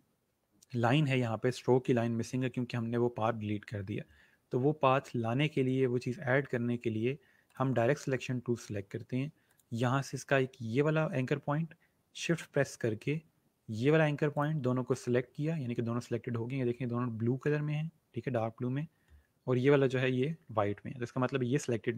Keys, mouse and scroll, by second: 7.4 click, 9.4 click, 14.3 click.